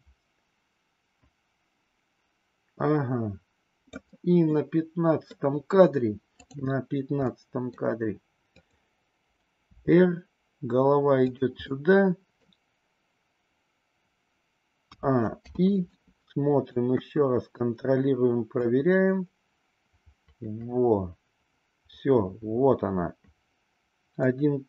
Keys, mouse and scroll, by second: 4.5-5.4 middle drag, 6.4 click, 7.1-7.9 middle drag, 8.4-9.1 drag, 9.8 r, 11.6-12.5 middle drag, 14.9 a, 15.5 i, 15.9-16.8 middle drag, 17.0 KP_1, 18.5-24.6 drag.